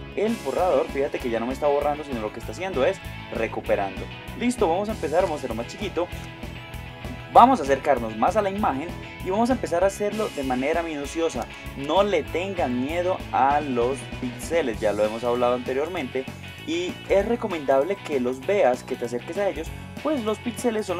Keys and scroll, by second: 6.3 space, 11.5 Tab, 16.2 shift+space, 17.0 space, 18.0 space.